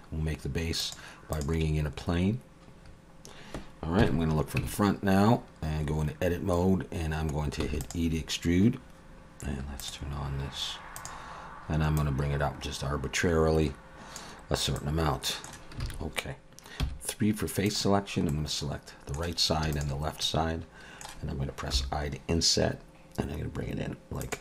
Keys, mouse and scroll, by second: 2.8-4.0 scroll up 3, 4.0 KP_1, 4.6 Tab, 5.3-6.0 scroll up 4, 7.6 e, 9.8 click, 12.0 click, 14.8 middle click, 15.8 alt+a, 16.8 3, 17.8 click, 18.3 middle click, 19.7 shift+click, 20.2 middle click, 21.7 i.